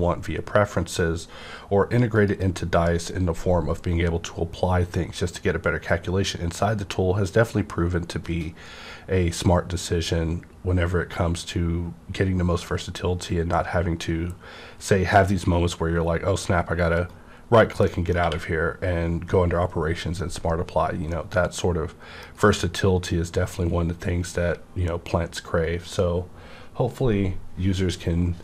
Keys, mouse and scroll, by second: 2.2 click, 2.2 q, 17.0 right click, 17.0 click, 17.8 middle click, 17.9 middle click, 17.9 right click, 18.2 q, 21.1-24.5 middle drag, 21.1 q.